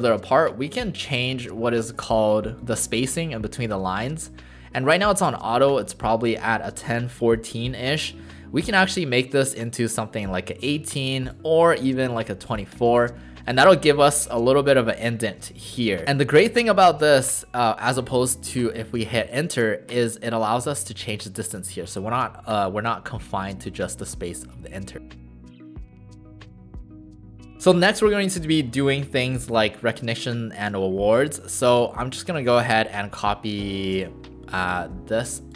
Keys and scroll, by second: 26.1 BackSpace, 26.1 BackSpace, 26.1 BackSpace, 26.4 BackSpace.